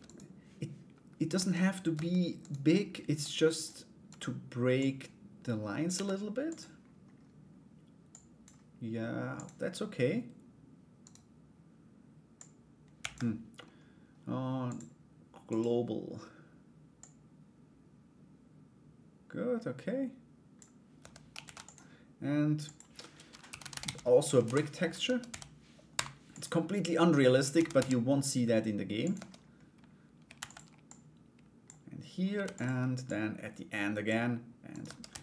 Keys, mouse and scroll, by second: 2.0 right click, 2.8 click, 3.6 right click, 4.3-5.4 drag, 7.8 click, 8.9 click, 10.6 right click, 11.9 click, 14.3-15.3 drag, 16.5-20.1 drag, 20.6 Tab, 21.0 ctrl+a, 22.2-24.4 drag, 24.6 Tab, 24.9 a, 25.5 u, 27.1 a, 27.3 s, 28.7 Tab, 29.9 shift+d, 30.5 click, 32.7 click, 34.3 right click, 34.4 Tab, 34.7 a.